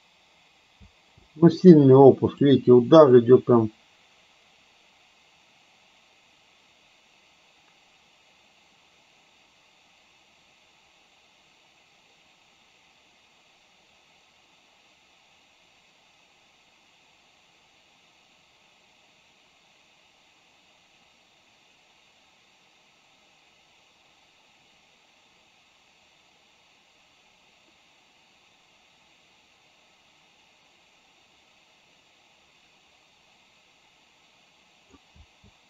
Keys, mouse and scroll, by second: 1.0 space, 2.5-35.1 drag, 35.2 space.